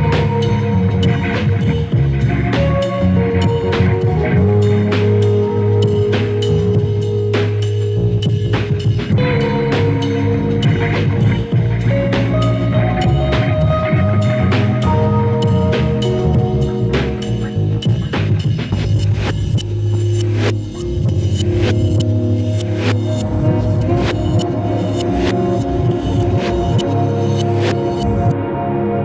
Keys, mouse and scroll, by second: 3.3-4.4 drag, 4.8 ctrl+s, 5.6-6.7 drag, 9.6 click, 10.9-14.0 drag, 15.0-16.8 drag, 17.7 n, 18.1 n, 18.3 n, 19.7-20.7 middle drag, 21.0 click, 21.2 click, 21.9 click, 22.3 click, 22.7 ctrl+s, 24.0 click, 24.0-24.6 scroll down 9, 24.6-27.7 shift+middle drag, 28.2 click, 28.5 KP_Decimal, 28.9 middle click.